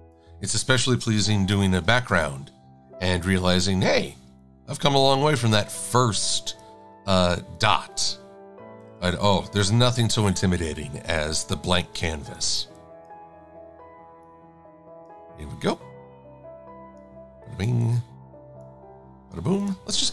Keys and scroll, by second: 1.6 x, 2.1 super+a, 3.8 a, 5.2 e, 7.4 a, 9.3 shift+x.